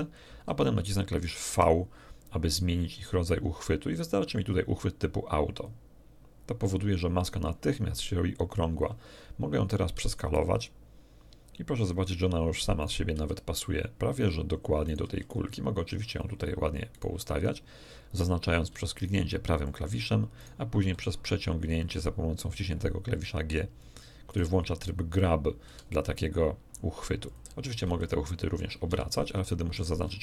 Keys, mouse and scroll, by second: 1.5 v, 5.5 click, 9.9 s, 11.7 click, 12.8 right click, 13.1 g, 13.9 click, 14.8 right click, 15.0 g, 16.1 click, 16.9 right click, 18.7 g, 19.6 click, 20.3 right click, 20.7 g, 22.5 click, 24.3 right click, 25.7 g, 27.2 click, 27.8 r, 29.3 shift+Escape, 29.7 shift+right click.